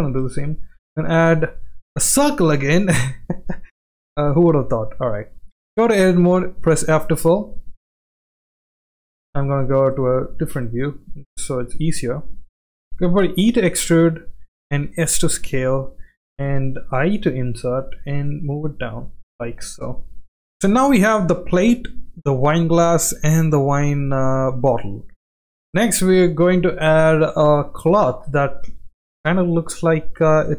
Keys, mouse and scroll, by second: 0.0 shift+middle drag, 0.4 shift+a, 3.0 s, 5.5 Tab, 6.3 f, 9.3 middle click, 10.3 middle click, 11.0 e, 14.7 s, 16.9 i, 18.1 g, 19.8 middle click, 20.5 shift+middle drag, 24.3 click, 24.9 click, 25.3 shift+middle click, 26.0-27.3 middle drag, 27.9-28.3 shift+middle drag, 28.9 shift+middle drag.